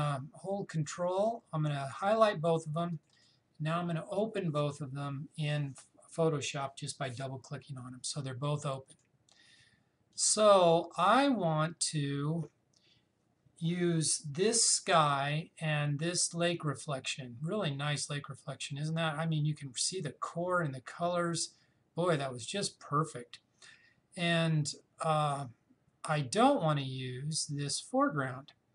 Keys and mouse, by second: 2.9 ctrl+click, 8.9 ctrl+click.